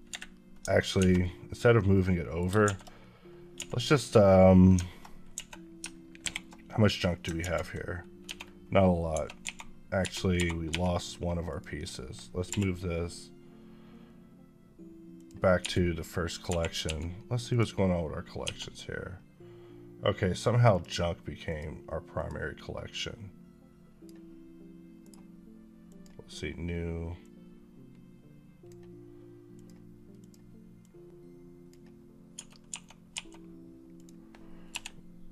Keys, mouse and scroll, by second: 0.8 alt+a, 1.0 middle click, 1.8 middle click, 2.5 shift+a, 5.2 a, 6.1 alt+h, 7.2 ctrl+z, 8.1 1, 9.3-10.5 typing, 11.3 click, 12.3 m, 15.0 click, 15.4 1, 15.8 middle click, 16.3 2, 17.3 click, 18.3 1, 20.5 click, 24.9 right click, 27.4 click, 32.2-33.0 typing, 33.8 click, 34.5 m.